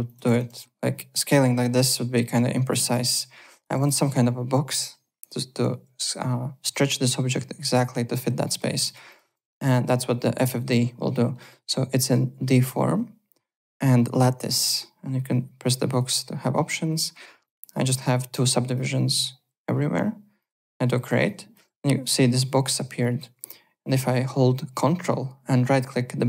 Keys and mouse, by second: 0.0 click, 0.1 ctrl+f, 0.5 r, 0.9 click, 2.4 ctrl+click, 2.5 click, 2.8 ctrl+z, 3.1 click, 3.8 ctrl+z, 4.0 w, 8.4 alt+middle click, 8.5-9.8 typing, 8.8 click, 9.5 click, 9.8 alt+click, 12.5 click, 15.8 click, 17.4 click, 17.9 click, 18.5 click, 20.3 click, 21.2 alt+click, 23.0 alt+click.